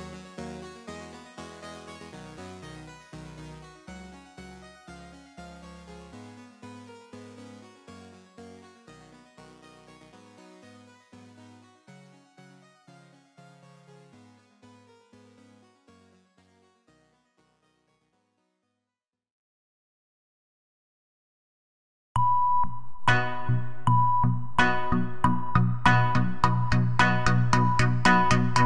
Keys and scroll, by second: 2.5 Delete, 4.4 ctrl+w, 11.9-13.0 typing, 13.1 Up, 13.2 Return, 22.1-23.1 typing.